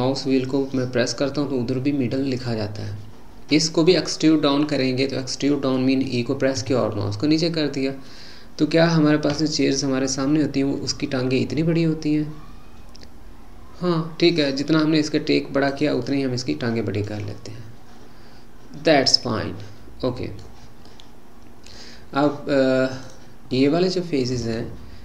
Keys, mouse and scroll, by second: 4.5-4.8 scroll down 1, 4.8-6.6 middle drag, 6.6 e, 16.1-20.4 middle drag, 20.9-23.0 middle drag, 23.0 click, 23.6-25.0 middle drag.